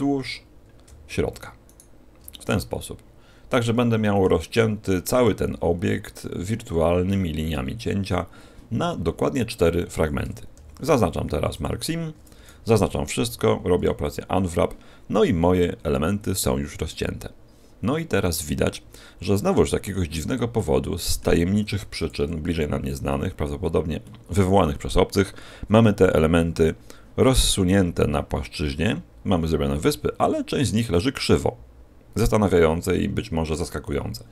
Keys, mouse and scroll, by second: 1.6 alt+shift+right click, 2.3 middle click, 10.5 ctrl+e, 12.1 a, 12.3 a, 13.1 u, 20.5 middle click, 21.6 u, 24.0 middle click.